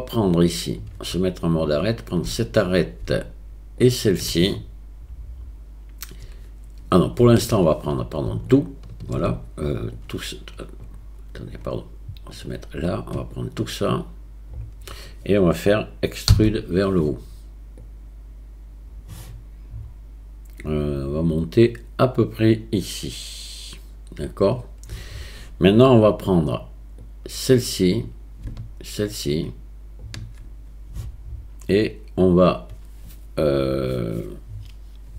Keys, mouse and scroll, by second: 0.7 click, 1.7 click, 3.8 shift+click, 8.6 alt+shift+click, 10.1 click, 11.5-12.5 drag, 13.3-14.7 drag, 16.3 e, 17.9-27.2 drag, 27.3 click, 29.3 shift+click.